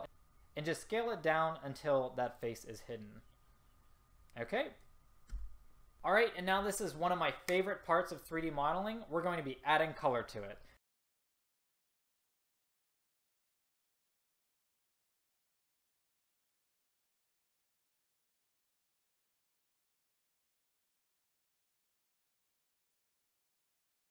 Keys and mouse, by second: 2.9-4.1 middle drag, 5.4 a, 10.9 click, 11.1 middle click, 11.2 BackSpace, 11.7 click, 12.0 click, 12.4 click, 12.8 click, 13.3-14.1 drag, 14.3 click, 14.4 a, 14.8 click, 15.6 click, 16.1 click, 16.4 click, 16.4 a, 16.9 click, 17.3 click, 17.9 click, 19.5 a, 20.4 click, 20.6-21.9 drag, 22.2 a, 22.4 click, 22.6 a, 23.0 click, 23.7 a.